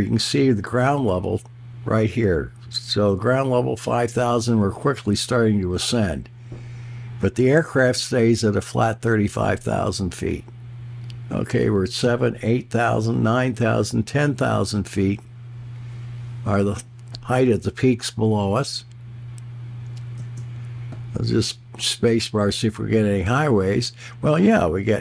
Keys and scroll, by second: 20.2 space.